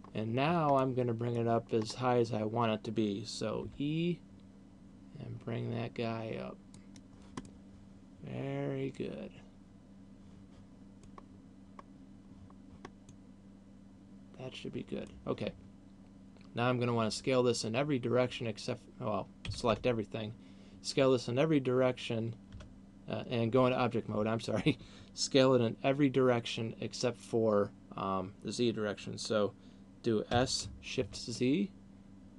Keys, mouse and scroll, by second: 0.0 click, 0.5-0.9 scroll down 4, 1.0 middle click, 2.0-2.7 scroll up 4, 4.0 e, 7.2 click, 7.7 middle click, 11.7-12.7 scroll down 1, 12.7-13.5 scroll down 1, 13.5 middle click, 19.7 a, 20.0 a, 22.7 Tab, 30.7 s.